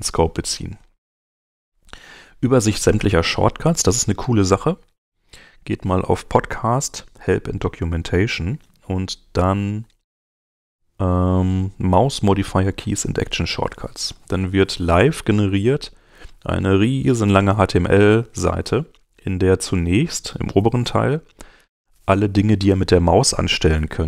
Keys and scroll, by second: 3.6 super+Tab.